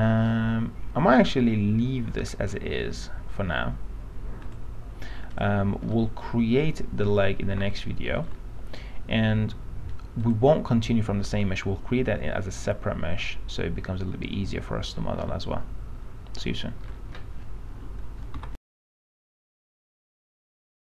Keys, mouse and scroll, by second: 0.5-2.9 alt+middle drag, 4.6 click, 6.1 alt+middle click, 7.9 alt+middle click, 10.4 click, 15.5 alt+middle click.